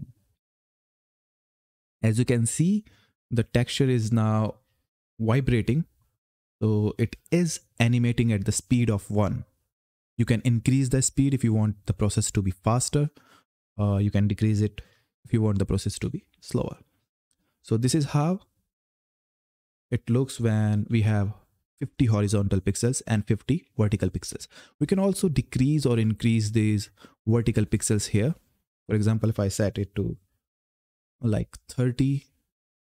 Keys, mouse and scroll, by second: 0.1 f, 4.3 Up, 15.0-16.1 typing, 18.8-20.7 typing, 22.4-23.2 typing, 25.7 click.